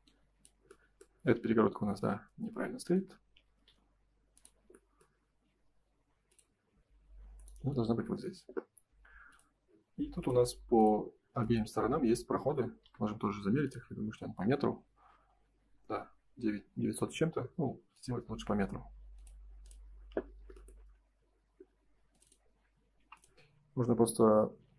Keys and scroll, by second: 3.6 F4, 8.3 space, 16.7 Escape, 17.2 space, 22.9 p.